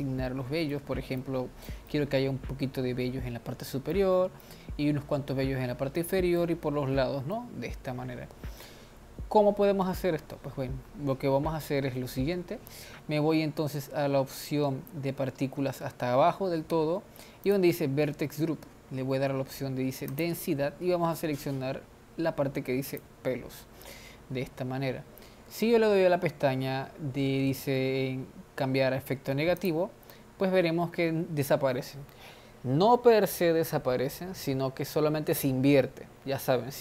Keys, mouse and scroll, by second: 11.1-11.9 scroll down 5, 15.0-17.0 scroll down 19, 17.0 scroll down 1, 17.4 click, 17.9-19.1 scroll down 8, 20.2-23.6 drag, 29.6 click.